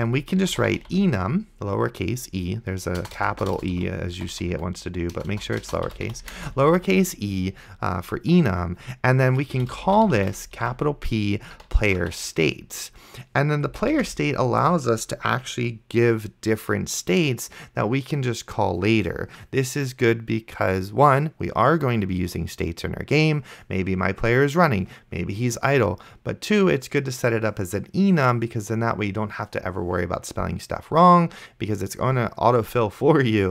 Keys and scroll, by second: 0.2-1.5 typing, 3.0-6.8 typing, 9.5-12.5 typing, 13.7 space, 14.2 shift+[.